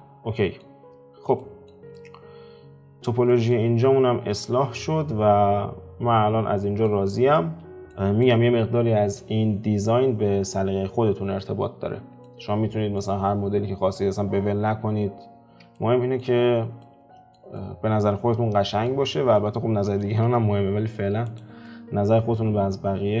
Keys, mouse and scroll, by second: 0.7-1.4 scroll down 2, 1.4-3.6 shift+middle drag, 3.6-4.4 scroll down 5, 4.4 alt+q, 4.7-6.9 middle drag, 6.9-7.3 scroll down 3, 7.3-11.0 middle drag, 12.2-14.9 middle drag, 14.9-15.7 scroll up 3, 15.7-21.2 shift+middle drag, 21.2 click, 21.6-22.4 middle drag, 22.4-23.2 scroll down 5.